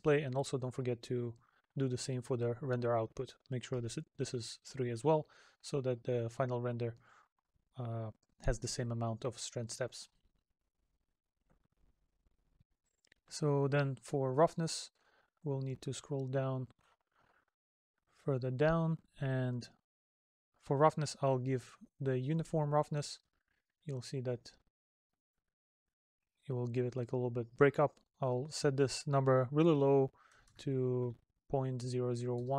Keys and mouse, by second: 5.4 middle click, 6.6 middle click, 8.0 middle click, 9.5 middle click.